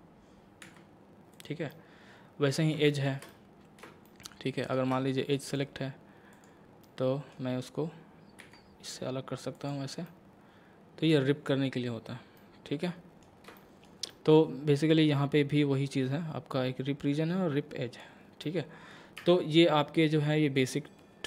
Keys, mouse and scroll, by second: 0.7 v, 1.3 click, 1.7-4.1 middle drag, 4.1-5.5 shift+middle drag, 5.5 click, 6.8-8.4 middle drag, 8.4 v, 9.5 click, 10.0 scroll up 1, 12.0 scroll down 1, 12.4 middle click, 14.9-15.9 scroll down 1, 15.9-18.4 drag, 18.4 middle click, 19.2 Tab, 20.6 click.